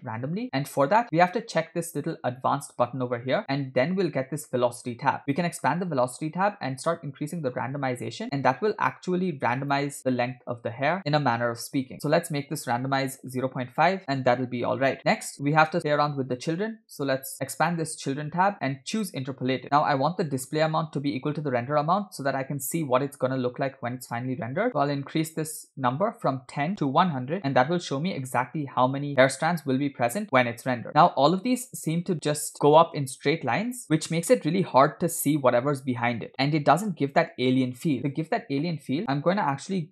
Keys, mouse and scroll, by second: 2.4-5.0 drag, 5.3 click, 5.9-6.6 scroll down 2, 6.9-9.8 drag, 10.2 middle click, 11.9-14.0 drag, 15.0 scroll down 4, 17.4-18.2 drag, 18.4-18.9 scroll down 3, 19.0 click, 25.3-27.4 drag, 27.3 0, 34.1-35.8 middle drag, 39.0 click, 39.0-39.5 scroll down 3.